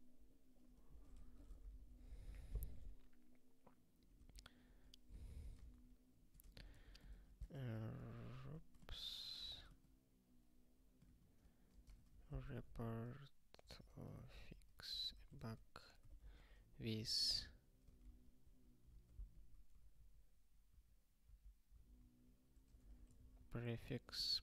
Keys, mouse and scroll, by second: 0.9 ctrl+n, 1.2 alt+^, 1.7 ctrl+s, 1.9 ctrl+p, 2.0 Return, 4.1-8.2 typing, 11.0-16.7 typing, 17.9 ctrl+a, 18.0 ctrl+k, 18.4 ctrl+p, 18.8 Return, 18.8 ctrl+p, 19.2 ctrl+y, 19.7 ctrl+n, 19.9 ctrl+n, 20.3 ctrl+a, 20.7 ctrl+k, 21.2 ctrl+p, 21.7 ctrl+p, 22.5-24.4 typing.